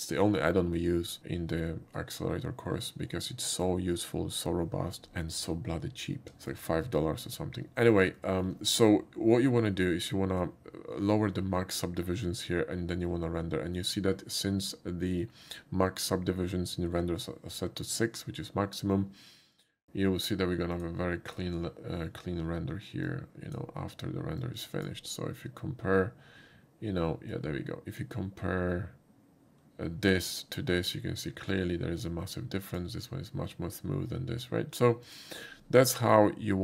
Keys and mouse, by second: 0.9 click, 6.3 shift+middle click, 8.2 shift+middle click, 19.5 click, 20.7 click, 21.3 click, 23.0 click, 24.4 click, 27.3 click, 31.5-32.8 drag, 35.0 click.